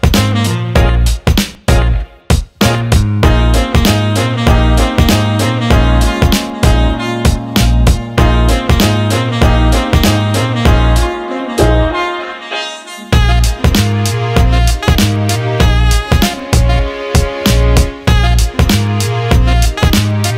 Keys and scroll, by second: 8.2 BackSpace, 8.5 Delete, 9.5 Delete, 10.2 Delete, 11.1 Delete, 14.0 Delete, 15.6 Delete, 16.2 Delete, 16.8 Delete, 17.4 Delete, 18.3 Delete.